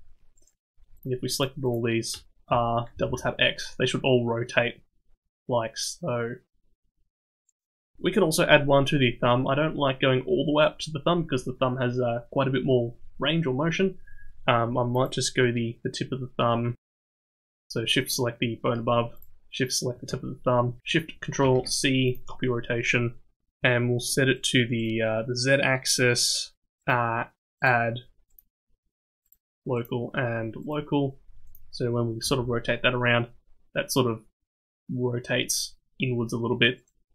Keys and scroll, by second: 2.5 r, 21.4 ctrl+shift+c, 32.2 r.